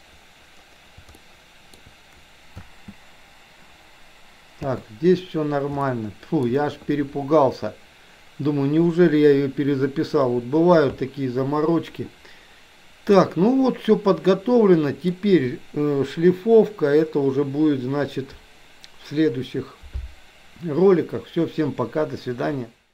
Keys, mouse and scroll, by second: 1.3 shift+middle click, 2.5 space, 5.3 space, 5.9 shift+middle click, 13.3-15.2 middle drag.